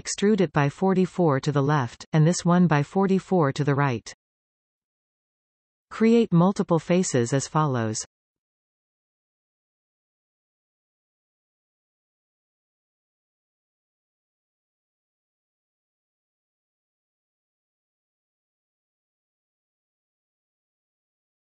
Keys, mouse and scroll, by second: 0.6 e, 3.6 click, 4.6 e, 6.4-10.9 middle drag, 10.9 click, 11.5 shift+click, 12.2 shift+click, 12.8 shift+click, 13.5 shift+click, 14.4 f, 15.0-16.5 middle drag, 16.5 click, 17.5 shift+click, 18.2 shift+click, 19.4 shift+click, 19.9-21.5 middle drag.